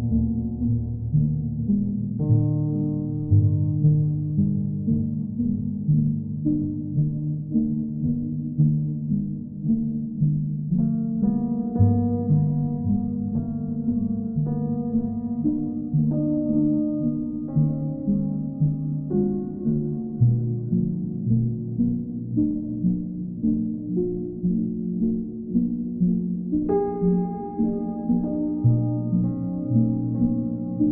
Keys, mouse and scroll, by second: 4.1-5.1 drag, 5.8-6.8 drag, 8.1 click, 8.4 ctrl+z, 9.3 right click, 10.9 click, 12.3-13.4 drag, 14.6-15.6 drag, 17.0-18.0 drag, 18.7 right click, 19.2-20.3 right drag, 20.6-21.7 drag, 25.2-26.3 drag, 28.3 click.